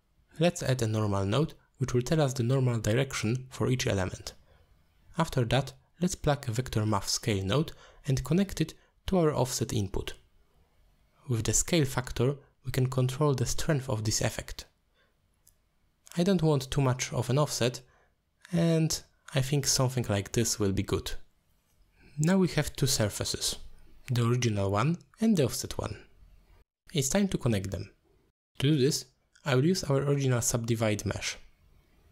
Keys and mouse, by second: 1.0 middle click, 1.5 shift+a, 5.0 click, 5.4 click, 5.7-9.0 drag, 9.3 middle click, 9.6 click, 9.9 click, 10.4 click, 11.3 click, 11.8-12.6 drag, 13.1-13.4 drag, 13.8 click, 14.5 click, 15.2-17.3 drag, 19.9-21.7 drag, 21.4 2, 23.0 middle click, 23.8 click, 24.6 m, 25.0 m, 25.3 m, 25.6 m, 26.6 click, 30.2 middle click.